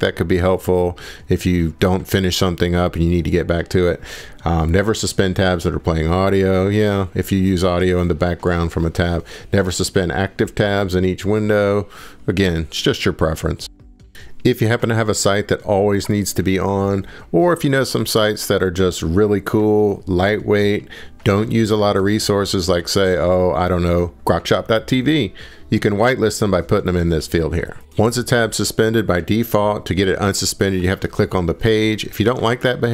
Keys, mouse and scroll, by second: 7.1 scroll, 7.6 scroll down 2, 14.1-14.6 scroll, 15.2 click, 17.8 click, 17.9 click, 20.4 click, 20.9-24.5 typing, 24.3 click, 24.7 click, 25.1 ctrl+c, 25.7 click, 26.2 click, 26.8 ctrl+v, 27.7 scroll down 1, 27.9 scroll, 28.1-28.4 scroll down 2, 28.6 scroll.